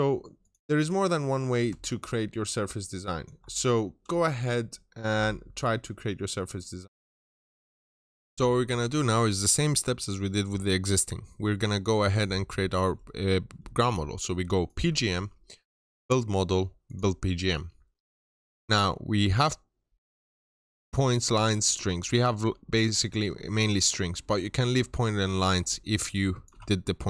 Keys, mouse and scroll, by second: 1.2 scroll up 1, 1.5-3.3 middle drag, 1.7 ctrl+shift+click, 4.1 click, 6.3 scroll up 1, 7.9 Delete, 14.6 click.